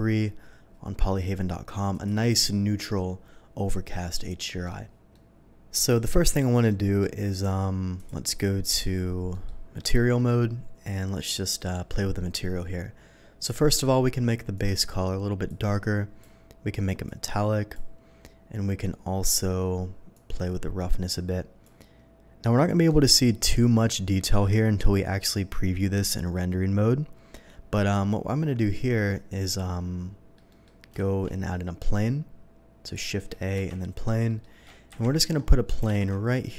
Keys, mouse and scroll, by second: 1.9 click, 3.9-4.6 middle drag, 5.1-5.8 middle drag, 6.3 click, 6.6 middle drag, 7.9 click, 8.6 click, 9.3 middle click, 9.7 middle drag, 11.5 middle click, 14.5 click, 15.4 click, 17.0 click, 18.7-19.2 middle drag, 20.1-21.6 drag, 29.1-30.3 middle drag, 30.4 middle drag, 30.9 shift+a, 32.8 click, 33.5 KP_3, 34.2 middle drag, 35.7 g, 35.9 z.